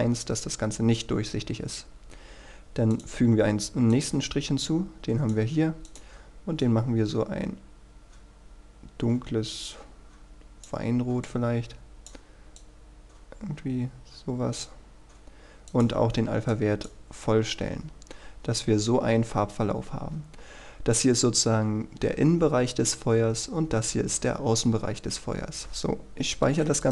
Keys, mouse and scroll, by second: 26.6 ctrl+s.